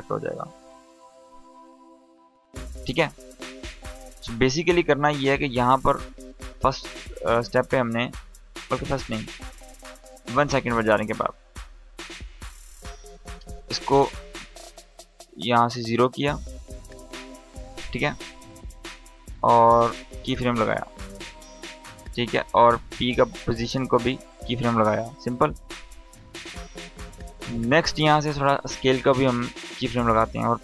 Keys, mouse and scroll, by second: 13.6-14.7 drag, 20.2 click, 23.2 click, 28.2 s, 29.2 click, 30.2 u.